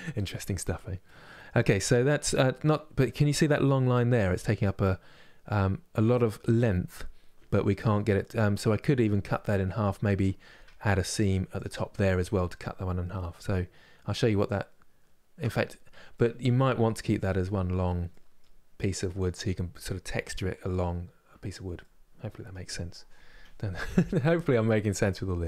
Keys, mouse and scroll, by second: 11.3 click, 15.8-25.4 middle drag.